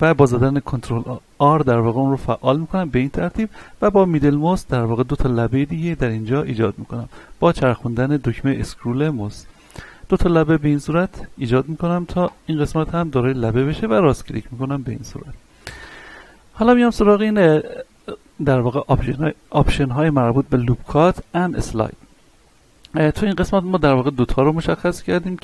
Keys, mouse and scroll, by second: 0.7 ctrl+r, 2.6 scroll up 1, 7.1-7.5 scroll down 1, 12.2 click, 13.0 right click, 14.2-23.8 middle drag, 23.8 click, 25.3-25.4 middle drag.